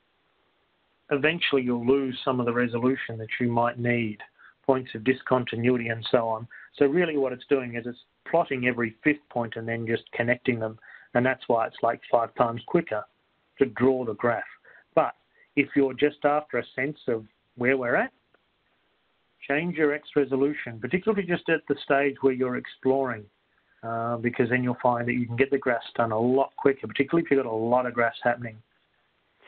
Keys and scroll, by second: 24.5-29.4 Down, 28.5-29.4 Left.